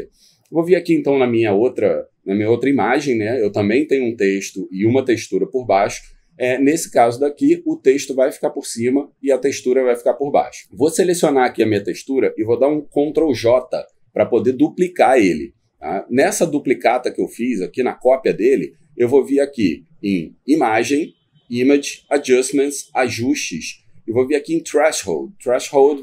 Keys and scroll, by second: 13.1 ctrl+j.